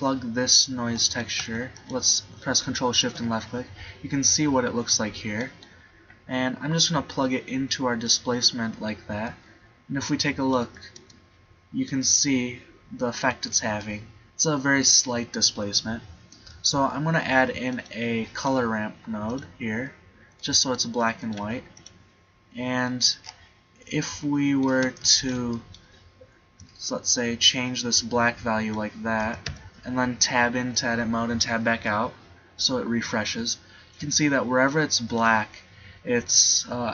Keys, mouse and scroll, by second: 3.9-5.3 middle drag, 9.3 middle click, 10.7 Tab, 11.1 Tab, 16.6 shift+a, 19.4 click, 21.5 g, 21.9 click, 29.2 Tab, 29.5 Tab, 35.8 middle click.